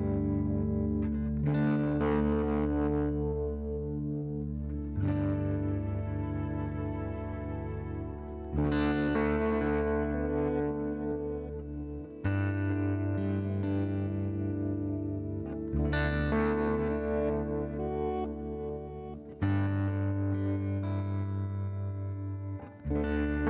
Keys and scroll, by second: 8.5 f, 8.8 z, 9.3 F4, 9.8 ctrl+v, 11.2 alt+q, 21.3 5, 21.9 Return, 22.4-23.3 typing.